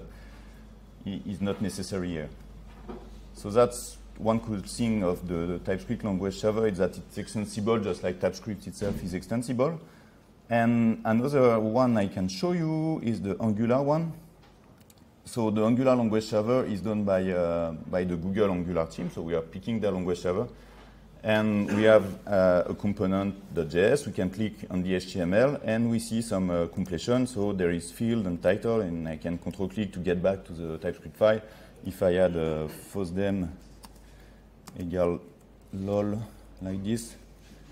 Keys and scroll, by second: 4.6 ctrl+3, 26.9 ctrl+space, 37.4 ctrl+s.